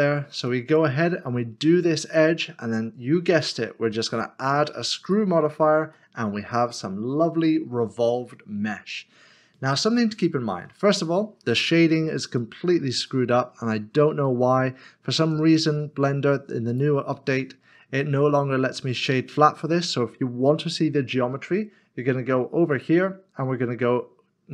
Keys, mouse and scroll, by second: 3.4 click, 5.9 middle click, 6.8-7.5 scroll down 1, 7.5 middle click, 13.1 shift+middle click, 13.9 scroll up 1, 16.7 right click, 18.9 click, 22.7 click.